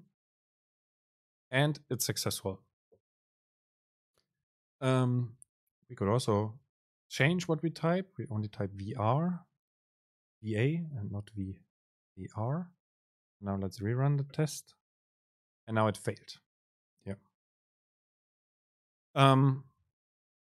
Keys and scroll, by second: 7.4 Delete, 14.4 super+r.